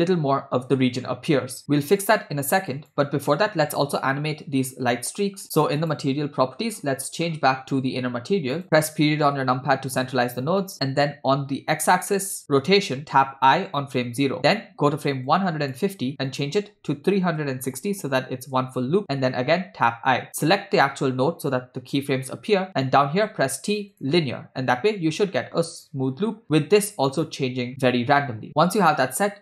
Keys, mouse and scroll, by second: 2.8 click, 5.5 scroll down 1, 5.8 click, 6.6 scroll up 2, 6.8 scroll down 2, 7.4 scroll down 1, 8.6 click, 8.6 scroll down 3, 9.1 KP_Decimal, 10.6 middle click, 11.5 scroll down 1, 13.6 i, 15.5 click, 16.3-18.5 drag, 19.9 i, 20.3 click, 23.2 t, 25.8 space.